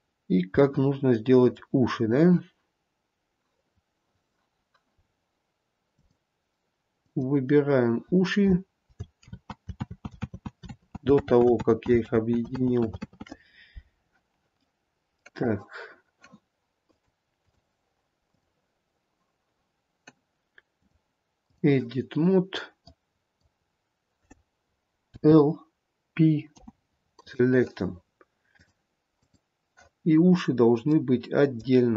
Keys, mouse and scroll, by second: 0.4-0.8 scroll down 2, 0.8 middle click, 1.3 middle click, 5.2-6.2 scroll up 2, 6.2 click, 7.3 click, 9.5 ctrl+z, 10.0 ctrl+z, 10.6 ctrl+z, 11.0 ctrl+z, 11.4 ctrl+z, 11.9 ctrl+z, 12.3 ctrl+z, 13.0 ctrl+z, 13.4 ctrl+z, 15.0 middle click, 17.1 click, 18.5 click, 23.0 click, 25.4 l, 26.7 p, 28.8 click, 30.3-31.2 scroll down 1, 31.2 middle click, 31.2-31.8 scroll down 1.